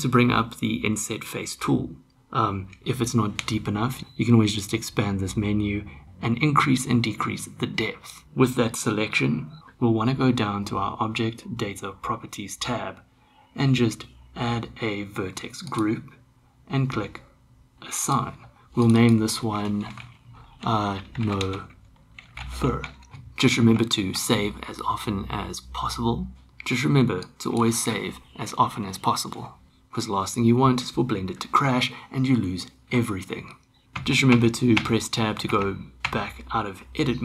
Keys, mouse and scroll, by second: 4.6 click, 6.0-8.2 drag, 15.7 click, 18.0 click, 18.8 click, 19.0-23.1 drag, 23.7 ctrl+s, 33.8 Tab, 34.0 Tab, 34.3 Tab, 34.7 Tab, 35.5 Tab, 36.0 Tab.